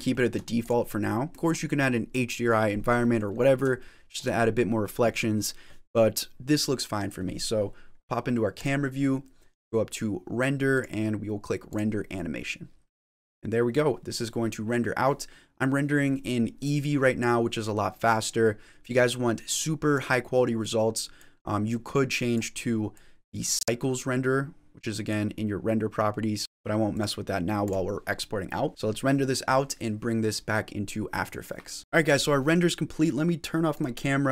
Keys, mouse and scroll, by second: 0.0 ctrl+z, 0.0 shift+middle click, 0.0 scroll up 4, 0.4 click, 0.7 scroll up 1, 0.9 middle click, 1.3 shift+middle click, 1.3 shift+scroll down 1, 3.3 scroll up 7, 3.7 shift+middle click, 4.4-6.0 scroll down 3, 8.4 click, 10.6 click, 25.7 click.